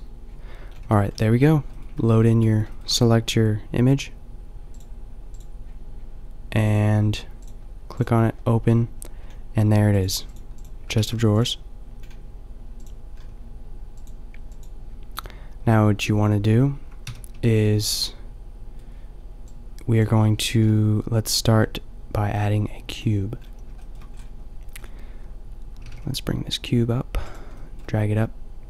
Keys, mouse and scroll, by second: 0.8 a, 2.0 a, 17.1 n, 19.9 n, 20.6 shift+a, 25.8 g, 27.5-28.6 drag.